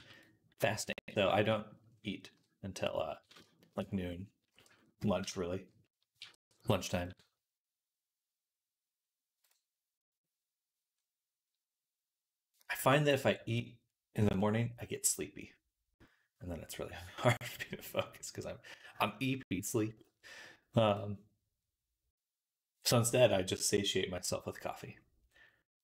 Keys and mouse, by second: 0.5 a, 0.8 x, 2.2 KP_1, 6.0 t, 6.9-25.8 drag.